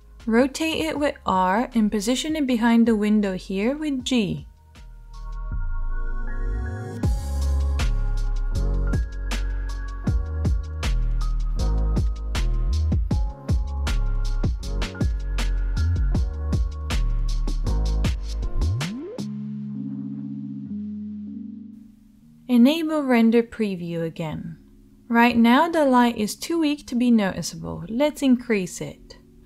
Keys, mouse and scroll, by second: 0.8 s, 3.3 g, 6.7 r, 9.7-16.0 right drag, 11.1 g, 13.9 s, 16.0-19.3 drag, 17.3 r, 19.9 g, 26.1-29.4 drag.